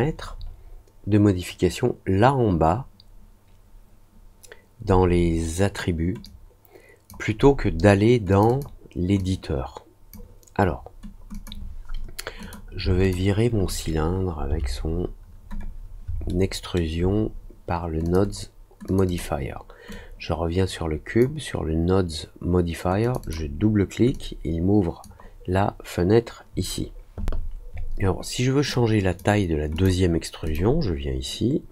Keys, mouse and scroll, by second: 6.2 click, 8.2 click, 8.4 click, 9.1 click, 11.3 click, 12.3 click, 13.0 shift+click, 16.2 alt+middle click, 18.0 click, 18.8 click, 19.0 click, 19.8-21.1 drag, 23.0 click, 23.2 click, 24.1 click, 28.7-29.1 drag, 29.7 click, 30.4 click.